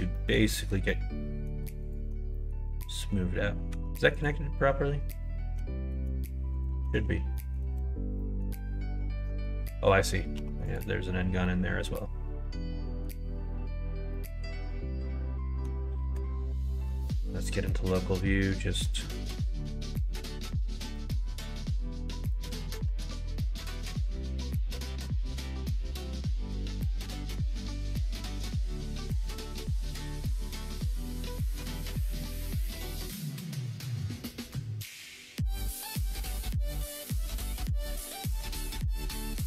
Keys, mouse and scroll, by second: 0.1 middle click, 0.5 middle click, 0.8 middle click, 1.8 alt+click, 2.3 middle click, 3.7 1, 4.1 click, 5.5 g, 6.7 ctrl+z, 7.3 alt+middle click, 7.6 alt+z, 8.1 middle click, 9.2 middle click, 10.3 3, 10.6 click, 11.4-13.0 middle drag, 14.1-15.6 middle drag, 16.7 ., 16.8 i, 17.7 middle click, 18.3 middle click, 19.6 k, 24.8 k, 28.0 click, 28.2 middle click, 28.8 middle click, 29.2 middle click, 29.5 middle click, 30.2 3, 30.4 middle click, 31.1 middle click, 32.2 alt+click, 32.8 middle click, 33.7 middle click, 35.5 1, 36.0 middle click, 37.1 middle click, 37.4 h, 37.9 middle click, 38.5 middle click, 39.1 middle click.